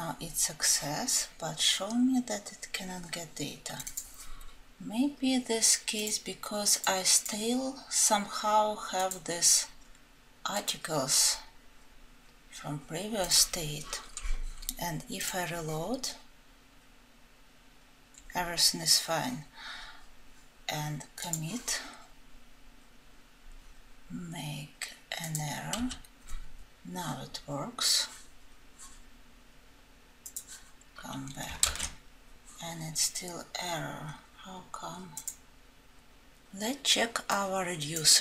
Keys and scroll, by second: 31.2 ctrl+z.